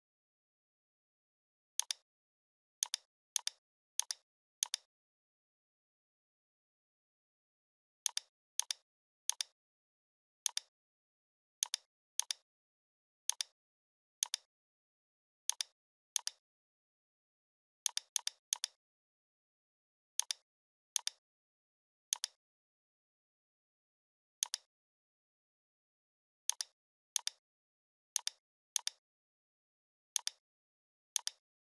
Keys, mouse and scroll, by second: 0.1 right click, 1.8-5.1 drag, 6.5 ctrl+z, 8.1 click, 12.2 shift+click, 13.3 click, 14.2 shift+click, 15.5 click, 16.2-17.0 alt+drag, 19.5 Delete, 20.2-23.4 drag, 28.7 shift+click, 29.1 right click, 30.2 click.